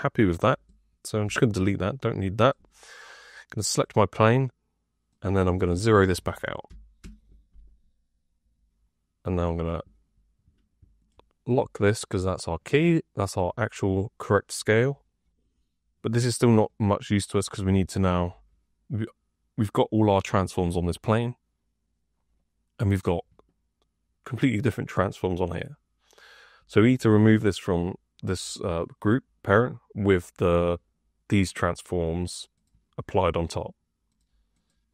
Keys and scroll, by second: 1.1 Delete, 6.6 KP_0.